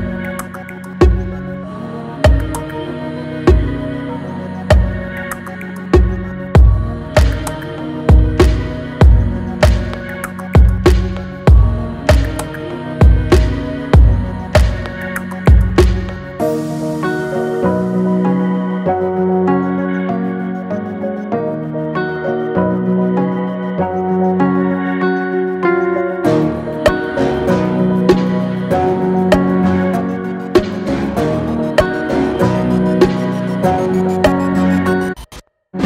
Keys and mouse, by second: 10.3 click, 11.4 click, 20.4 click, 23.0-24.3 drag, 29.0 click.